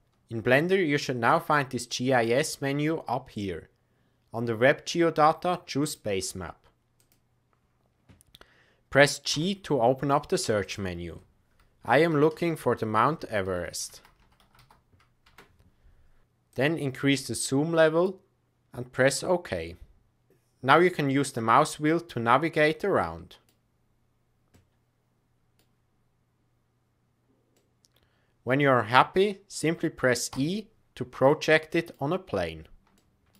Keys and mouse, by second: 2.2-23.8 drag, 24.8 click, 24.9 drag, 25.3 click, 25.8 middle click, 26.2-27.8 drag, 27.8 middle click, 28.0-28.4 drag, 28.4-30.7 drag, 31.2-31.9 middle drag, 32.9-33.3 shift+middle drag.